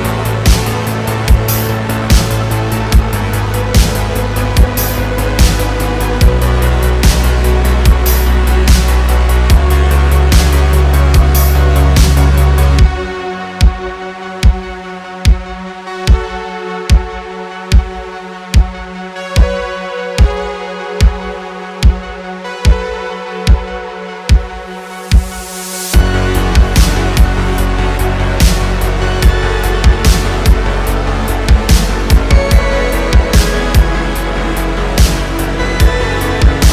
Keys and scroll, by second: 0.6 s, 2.1 t, 4.4 s, 6.3 9, 6.3 0, 6.4 0, 6.5 Return, 6.9 ., 10.4 z, 11.8 z, 15.8 s, 17.5 shift+d, 17.7 x, 18.3 y, 21.1 shift+d, 21.2 z, 22.6 s, 24.8-26.5 typing, 31.4 s, 35.6 ..